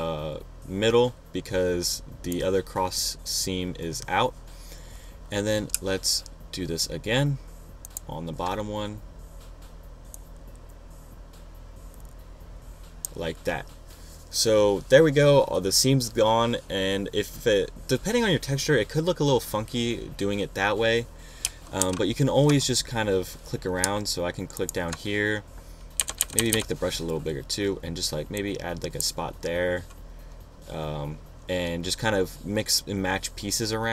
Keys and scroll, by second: 22.4 super+-, 28.1 ].